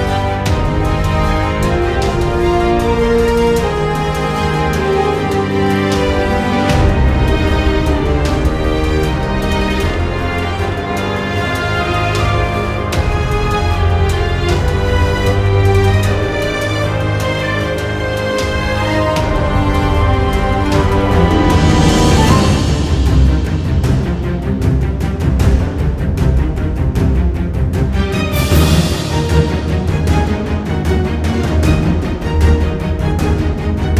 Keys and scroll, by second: 10.4 super+=, 10.7 space, 12.3 space, 13.4 super+z, 13.7 space, 20.0 `, 23.4 space, 24.7 super+z, 26.9 super+=, 27.1 space, 29.7 `.